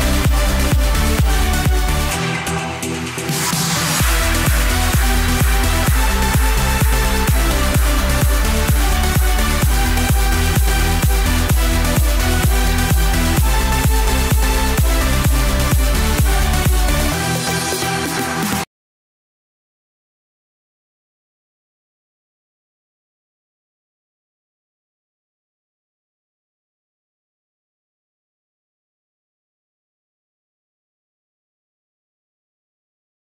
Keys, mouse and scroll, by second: 0.0 click, 0.2-0.9 scroll down 3, 0.9 click, 2.2 click, 2.8-4.1 scroll up 2, 6.1-12.5 drag, 12.6 scroll down 2, 12.9-14.4 middle drag, 14.4 scroll up 2, 14.6-15.6 shift+middle drag, 15.6-16.9 scroll up 2, 16.9 scroll down 2, 17.0-18.0 middle drag, 18.0 click, 20.5-21.2 drag, 21.4-23.6 middle drag, 24.0-24.3 scroll up 1, 24.3-25.0 shift+middle drag, 25.0-25.8 scroll up 1, 27.9 click, 28.8 scroll down 2, 28.9-31.2 middle drag, 31.2-33.2 drag.